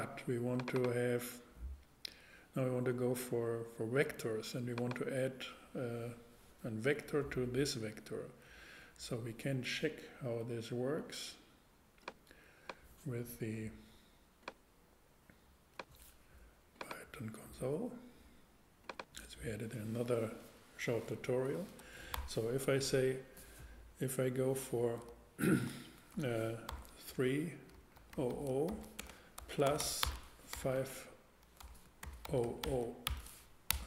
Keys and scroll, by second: 22.1 shift+8, 25.5-33.1 typing, 33.7 shift+Return.